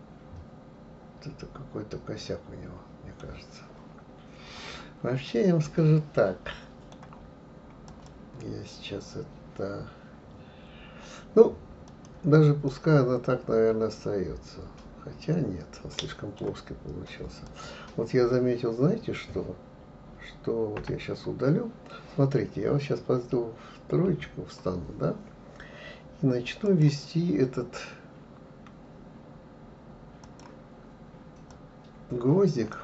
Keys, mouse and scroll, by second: 5.3-7.9 middle drag, 7.9 click, 11.9 click, 12.7-15.7 middle drag, 17.5 click, 20.8 Delete, 24.1 KP_3, 26.6-29.7 drag.